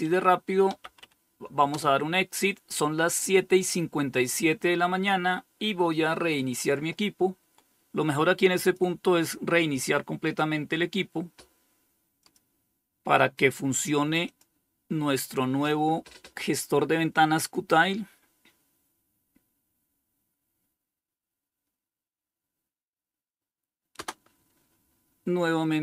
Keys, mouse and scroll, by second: 0.0-0.7 typing, 0.9 Return, 7.8 click, 9.5 click, 11.4 click, 13.5 click, 23.2 Return.